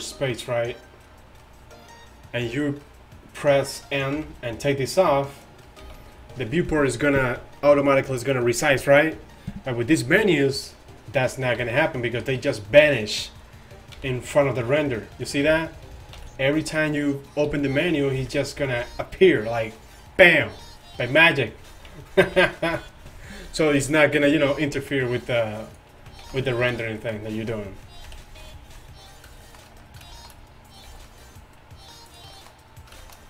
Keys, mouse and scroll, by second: 4.5 n, 6.1 n, 11.8 t, 14.3 n, 15.8 n, 16.4 n, 17.7 t, 18.5 n, 21.3 t, 22.1 t, 22.5 n, 26.1-27.1 right drag, 26.2 z, 26.3 z, 26.6-27.1 drag, 28.1 KP_7, 30.9 g.